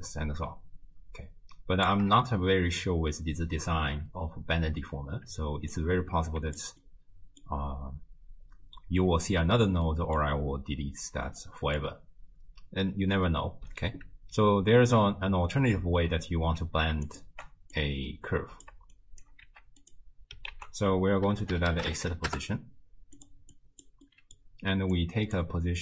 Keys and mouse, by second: 5.7 alt+click, 6.9 middle click, 9.9 middle click, 11.3 middle click, 17.1 ctrl+shift+click, 17.7 click, 19.0 shift+click, 19.5 g, 20.5 ctrl+a, 23.6 click, 24.1 middle click, 25.0-25.8 drag.